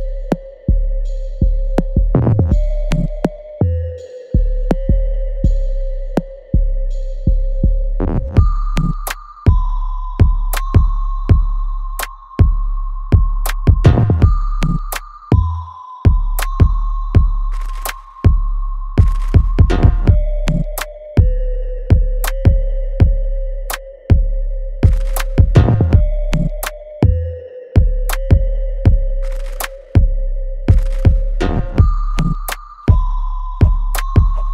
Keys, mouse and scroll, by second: 3.9 click, 8.3-11.0 drag, 20.8 click, 22.7 click, 22.8-34.5 ctrl+drag.